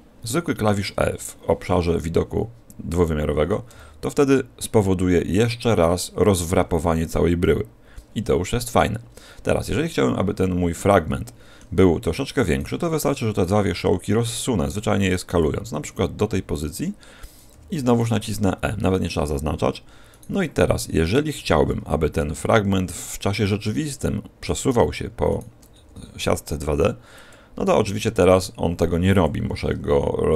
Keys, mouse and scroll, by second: 3.6 e, 9.0-10.6 scroll up 2, 11.0 middle click, 11.0 scroll up 3, 11.8-12.4 scroll up 1, 12.4 right click, 12.4 scroll up 2, 13.2 shift+right click, 13.6 s, 15.3 click, 15.5-16.9 scroll down 7, 16.9-17.2 scroll down 1, 17.5 e, 20.0 right click, 21.0 shift+right click, 22.1 g, 24.4 right click, 25.2 shift+right click, 25.7 g, 27.2 click, 27.5 s, 29.2 click.